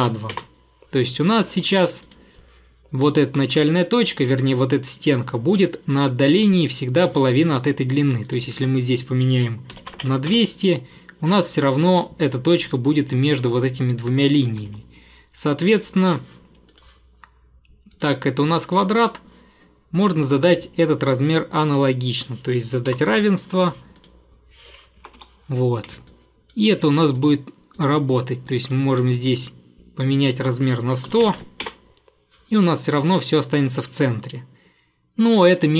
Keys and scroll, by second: 0.0-0.3 typing, 0.4 Return, 9.5-10.5 typing, 14.6 Escape, 22.9 =, 25.1 Escape, 25.2 Escape, 30.9-31.8 typing, 33.0 Escape.